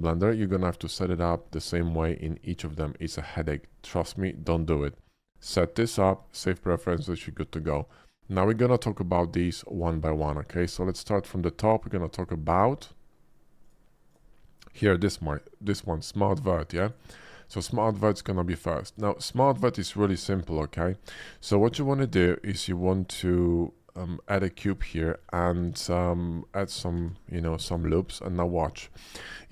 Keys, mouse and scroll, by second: 6.5 click, 9.7 click, 11.3 shift+middle click, 11.7 shift+middle click, 13.6 shift+click, 14.1 shift+click, 16.9 click, 17.8 click, 18.8 click, 19.8 shift+middle click, 20.4 shift+middle click, 21.4 shift+a, 25.0 middle click, 25.6 Tab, 26.2 middle click, 27.0 ctrl+r, 27.7 click, 28.0 scroll up 1, 28.3 middle click, 28.9 middle click.